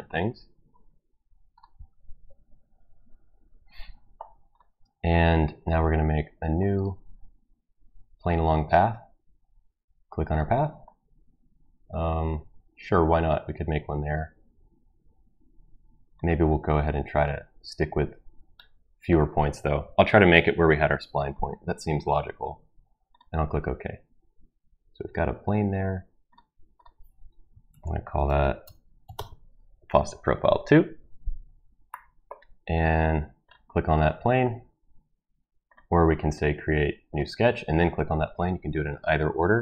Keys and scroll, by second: 27.7 ctrl+v, 28.6 BackSpace, 29.0 BackSpace, 29.1 Return.